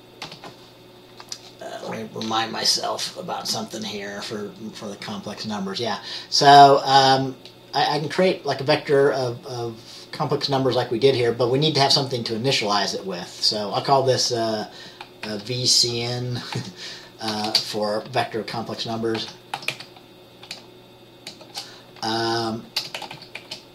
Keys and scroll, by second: 0.4 Return, 15.5 typing, 16.7-17.5 typing, 19.3-19.9 typing, 21.6 typing, 22.9-23.7 typing.